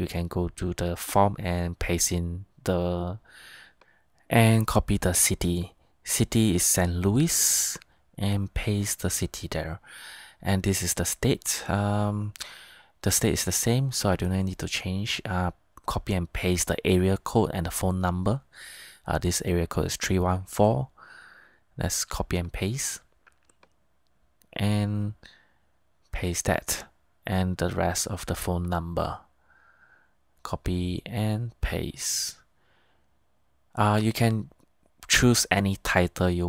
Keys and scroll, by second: 0.9 super+v, 1.4 super+Tab, 6.0 super+c, 6.4 super+Tab, 8.5 super+v, 11.6 super+Tab, 24.0 super+c, 24.4 super+Tab, 25.6 super+v, 26.0 super+Tab, 31.0 super+c, 31.5 super+Tab, 34.2 super+v.